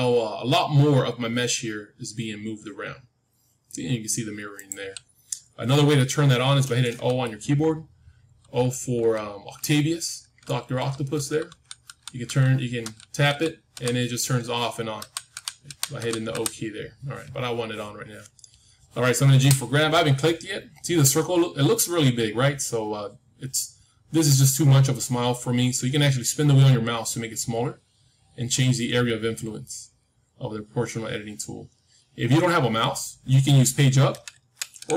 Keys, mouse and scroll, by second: 5.1-7.3 middle drag, 8.3-13.7 typing, 14.9-16.2 typing, 19.3 g.